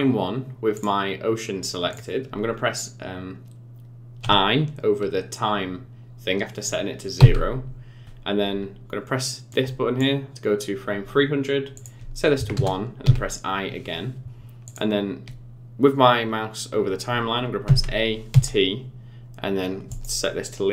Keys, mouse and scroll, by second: 0.7 click, 1.9 click, 9.5 click, 11.7 click, 13.0 i, 14.6 click, 17.6 a, 18.3 t.